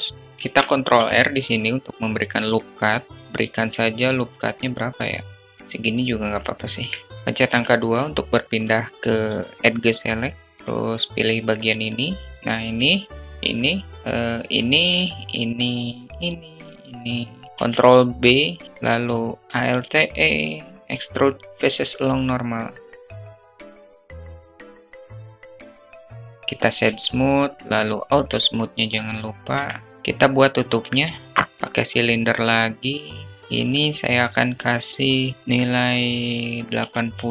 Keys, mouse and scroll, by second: 0.2 ctrl+r, 6.1 alt+click, 6.6 alt+click, 12.8 shift+click, 14.6-16.9 shift+drag, 17.0 shift+click, 17.5 ctrl+b, 19.5 alt+e, 25.0 Tab, 25.3 alt+click, 25.5 alt+drag, 26.5 q, 27.8-29.2 alt+drag, 29.2-29.9 middle drag, 30.0 shift+a, 34.2-37.3 drag.